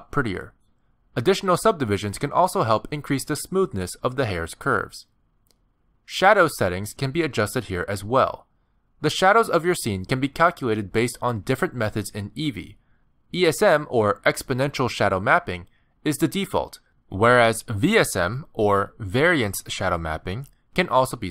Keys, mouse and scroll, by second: 5.6 click, 6.8 click, 7.7 scroll down 9, 9.9 click.